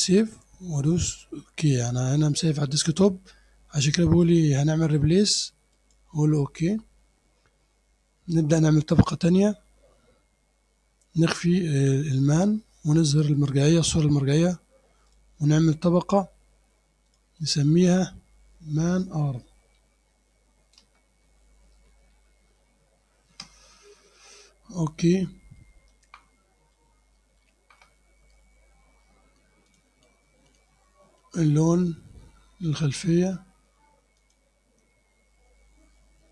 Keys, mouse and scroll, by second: 1.7 click, 5.8 click, 12.1 click, 13.4 click, 15.1 click, 17.1 click, 19.6-22.6 typing, 23.3 Return, 25.0 scroll up 2, 25.6 click, 26.7 click, 29.7 click, 34.2 click.